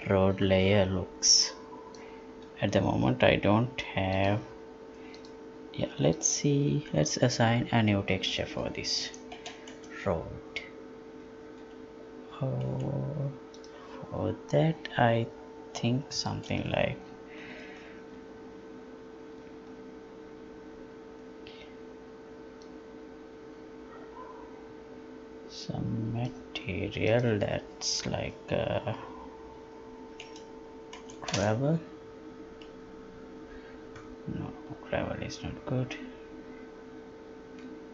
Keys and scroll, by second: 11.6 Escape.